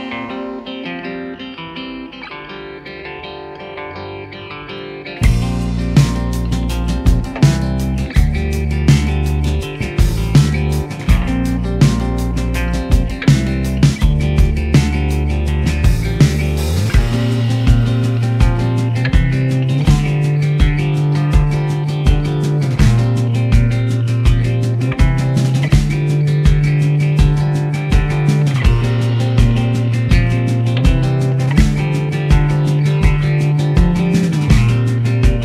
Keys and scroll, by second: 15.5 typing, 17.4 0, 17.5 0, 17.7 space, 17.8 Return, 20.0 1, 20.1 0, 20.1 0, 20.2 0, 20.4 Return, 22.9 1, 22.9 0, 23.0 0, 23.0 0, 23.1 Return, 25.5 BackSpace, 25.6 1, 25.7 Return, 25.7 0, 32.9 s, 35.3-35.4 typing.